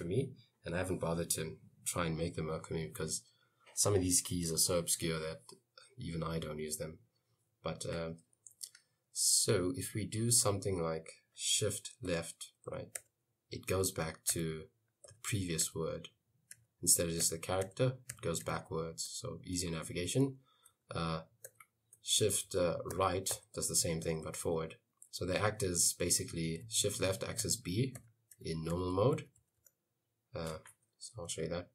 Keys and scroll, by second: 12.2 shift+Left, 13.0 shift+Left, 13.7 shift+Left, 14.4 shift+Left, 15.1 shift+Left, 15.7 shift+Left, 16.6 shift+Left, 17.3 shift+Left, 17.7 shift+Left, 18.2 shift+Left, 18.5 shift+Left, 19.2 shift+Left, 20.8 shift+Right, 21.5 shift+Right, 22.0 shift+Right, 22.6 shift+Right, 23.0 shift+Right, 23.4 shift+Right, 23.8 shift+Right, 24.1 shift+Right, 24.3 shift+Right, 24.5 shift+Right, 26.7 shift+Left, 27.5 shift+Left, 28.0 shift+Left, 28.4 shift+Left, 28.8 shift+Left, 29.0 shift+Left, 29.2 shift+Left, 29.6 shift+Left, 30.9 Escape, 31.2-31.7 typing.